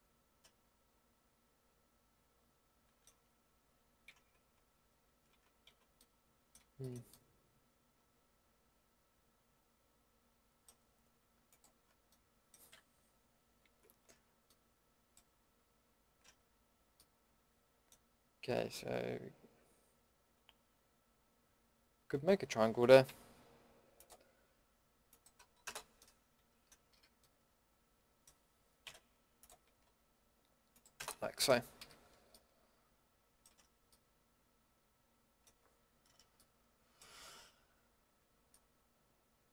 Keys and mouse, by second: 0.1 middle click, 4.0 ctrl+z, 4.7 ctrl+x, 5.7 ctrl+z, 6.0 middle drag, 11.5-14.1 drag, 14.1 ctrl+x, 16.7 middle click, 17.1 middle click, 17.4 middle click, 23.0 k, 26.9 a, 28.8 k, 31.8 a, 33.5 Tab, 38.2 Tab.